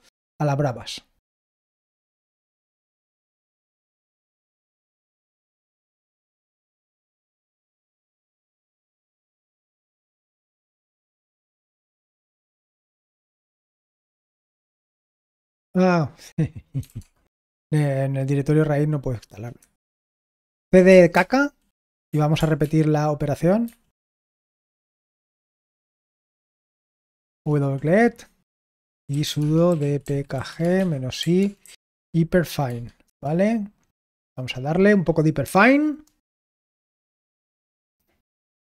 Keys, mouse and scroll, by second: 1.6 click, 2.0-3.5 ctrl+alt+drag, 2.3 ctrl+alt+v, 3.5 Return, 7.3 ctrl+p, 8.4 ctrl+p, 13.3 Return, 16.5-17.3 typing, 19.5 Return, 20.0-22.8 typing, 23.6 ctrl+alt+p, 24.1 typing, 24.9 ctrl+p, 28.5-32.6 typing, 33.0 Return.